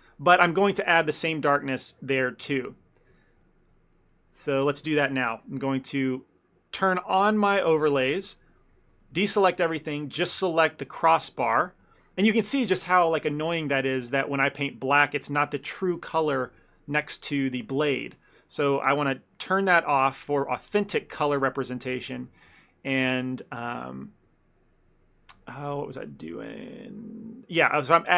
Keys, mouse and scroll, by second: 0.1 middle click, 0.3 ctrl+middle click, 1.7 middle click, 1.9 ctrl+middle click, 2.6 ctrl+middle click, 2.8 middle click, 3.0 middle click, 3.2 ctrl+middle click, 3.5 shift+middle click, 3.6 shift+middle click, 3.8 middle click, 4.0 middle click, 4.2 ctrl+middle click, 4.6 shift+middle click, 5.8 ctrl+middle click, 7.3 click, 7.9 shift+middle click, 8.2 ctrl+middle click, 9.0 a, 9.1 a, 10.3 l, 11.0 ctrl+middle click, 11.4 ctrl+middle click, 11.7 middle click, 11.9 shift+middle click, 12.2 ctrl+middle click, 13.7 middle click, 14.4 click, 15.4 ctrl+z, 19.0 click, 19.7 ctrl+middle click, 20.1 shift+middle click, 20.4 ctrl+middle click, 21.5 ctrl+middle click, 21.5 shift+middle click, 21.9 ctrl+middle click, 21.9 shift+middle click, 26.6 ctrl+middle click, 27.8 click.